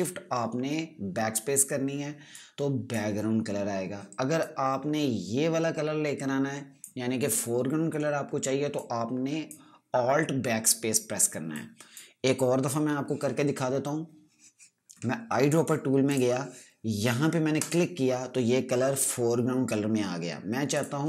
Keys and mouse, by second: 2.8 click, 16.0 right click, 16.6 click.